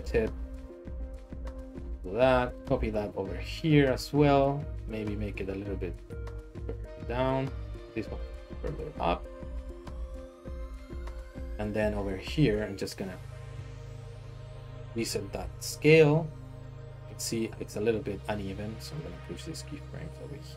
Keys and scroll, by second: 0.0 s, 0.2 x, 3.4 shift+d, 5.1 g, 6.9 Escape, 8.1 g, 13.5 alt+s, 15.4 alt+s, 18.9 g.